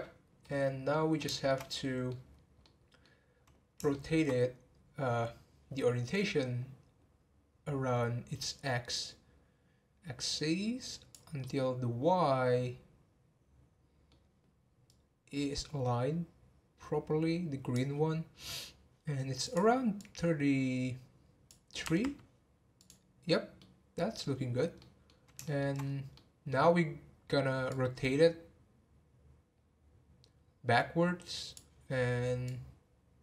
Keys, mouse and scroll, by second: 0.4-1.7 middle drag, 1.7 scroll down 1, 2.6-6.9 middle drag, 8.9-11.4 drag, 11.4-14.5 middle drag, 14.8-17.9 drag, 19.4-22.5 drag, 23.5 middle click, 24.3 scroll down 2, 24.8-25.8 middle drag, 25.8 scroll up 4, 26.1-27.6 middle drag, 27.6 click.